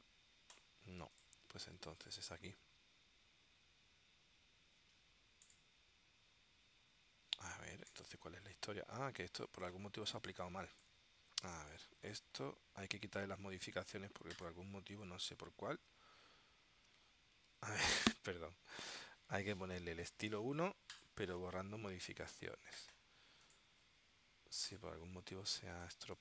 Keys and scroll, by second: 10.6 space, 17.7 super+z, 26.1 space.